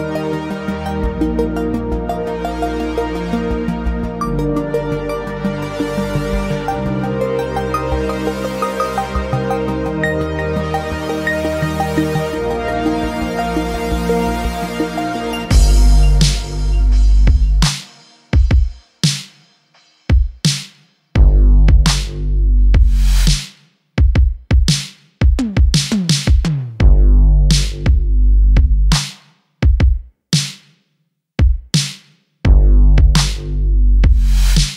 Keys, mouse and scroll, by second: 0.5-3.5 drag, 4.6 click, 11.4-12.7 drag, 15.2-15.8 middle drag, 16.1-16.6 scroll down 2, 16.6-17.3 middle drag, 17.7 click, 18.7 click, 20.4 click, 23.8-24.9 drag, 25.1-25.6 middle drag, 25.9-26.2 shift+middle drag, 27.5 middle click, 28.5-28.8 middle drag, 29.1 click, 29.5-30.0 middle drag, 30.2-30.7 scroll up 1, 30.9 click, 31.6-32.3 scroll up 1, 32.7-33.0 shift+middle drag, 33.9 drag.